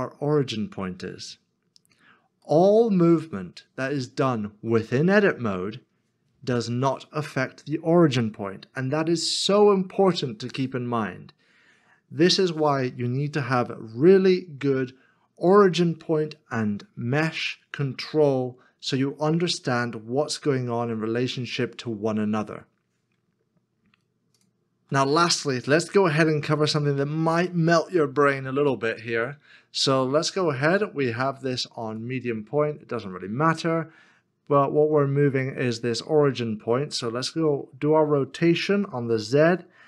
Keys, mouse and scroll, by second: 1.4 middle click, 1.5 scroll down 1, 2.5 scroll down 1, 2.6 middle click, 27.0 middle click, 37.3 middle click, 38.2 r, 38.8 z.